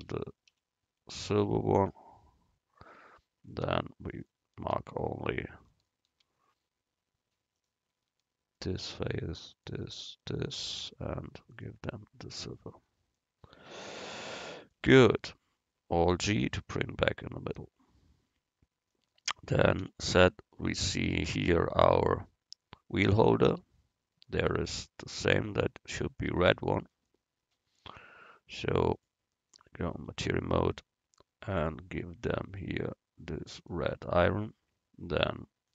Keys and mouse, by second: 7.4 right click, 7.6-9.5 drag, 8.6-11.9 right drag, 11.6-13.4 drag, 12.4 Tab, 16.4 alt+g, 20.0 z, 21.3 middle click, 21.9-23.6 right drag, 25.2-27.0 drag, 28.0 Tab, 30.1 Tab.